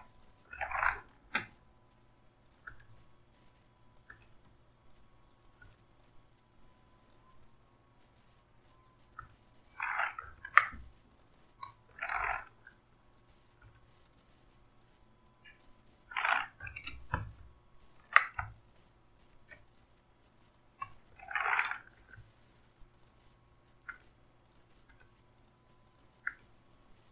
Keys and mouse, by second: 1.2 Delete, 4.1 Delete, 5.6 Delete, 9.1 Delete, 10.8 ctrl+z, 17.1 ctrl+click, 18.4 shift+click, 21.9 Delete, 23.9 Delete, 24.9 Delete, 26.2 Delete.